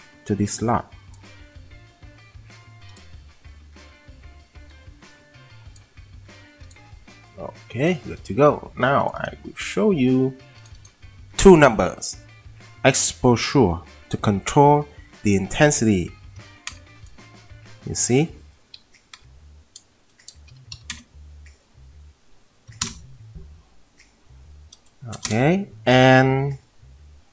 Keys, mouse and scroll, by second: 16.4 2, 18.8 click, 20.8 typing, 22.2-22.7 typing, 25.2 typing.